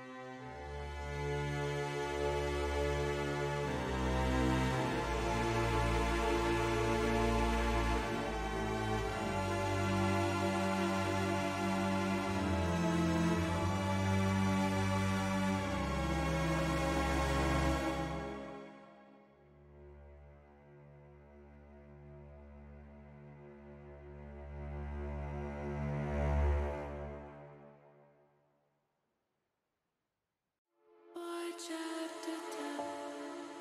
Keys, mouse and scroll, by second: 0.3 shift+middle click, 1.8 KP_1, 3.1 e, 8.9 click, 10.8 shift+middle click, 12.5 ctrl+r, 17.2 shift+middle click, 19.0 click, 20.8 click, 21.5 click, 22.8 click, 24.0 click, 25.1 shift+click, 28.4-30.0 drag, 31.0 click, 31.8 click, 33.4 click.